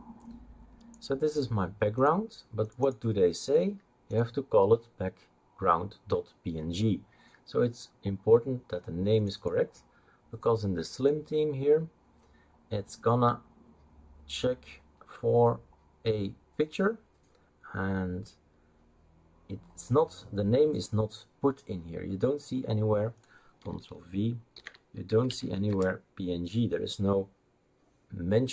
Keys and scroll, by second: 24.5 ctrl+f, 24.8-25.9 typing.